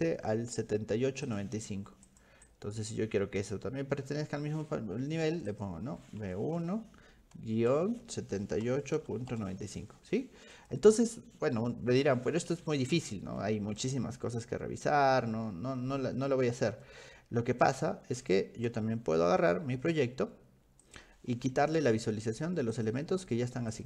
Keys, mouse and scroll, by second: 1.3 click, 2.1 click, 2.5 click, 5.5 click, 6.2 b, 6.6 1, 7.7-9.9 typing, 10.6 click, 14.2-14.6 scroll down 2, 14.9-15.8 scroll down 4, 15.8 scroll up 2, 15.9 click, 15.9 middle click, 16.0-16.3 scroll down 4, 16.3 middle click, 16.9 middle click, 18.7 v, 18.9 v, 20.9 click, 22.3 click, 22.7 click, 23.2 click, 23.7 click.